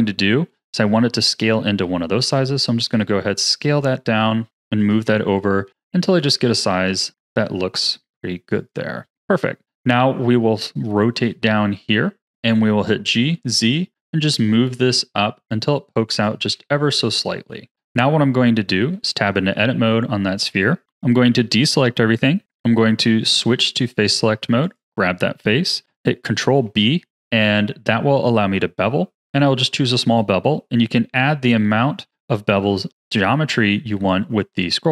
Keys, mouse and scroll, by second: 1.8 s, 3.8 g, 5.1 s, 6.3 g, 9.6-12.2 middle drag, 12.2 g, 16.4 z, 17.7 middle click, 18.0-18.8 scroll up 1, 18.8 Tab, 21.2 a, 23.6-24.7 drag, 26.3 ctrl+b.